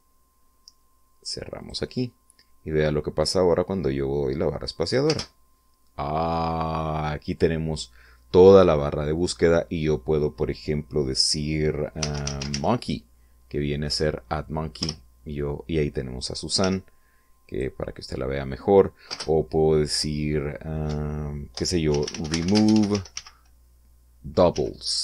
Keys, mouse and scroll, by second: 1.5 click, 2.9-3.3 scroll down 2, 5.0 space, 11.9-12.5 typing, 14.8 Return, 16.5 g, 17.4 click, 19.0 space, 20.8 BackSpace, 21.9-23.1 typing, 24.5 l.